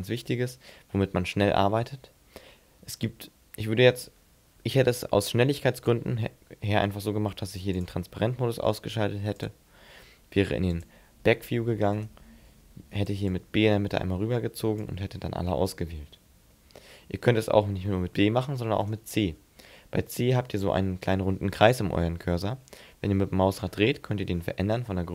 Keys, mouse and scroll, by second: 1.4-3.3 scroll up 4, 7.7 click, 9.4 click, 12.0 right click, 12.4 b, 16.5 middle click, 18.1 middle click, 18.8 right click, 19.3 c.